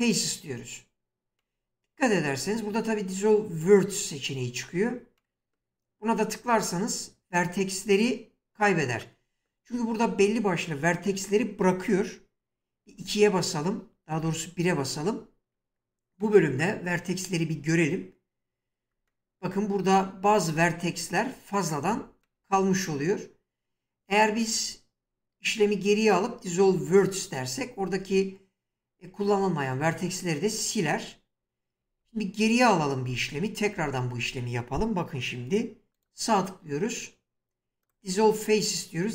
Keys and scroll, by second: 12.9 2, 14.2 1, 31.8 ctrl+z.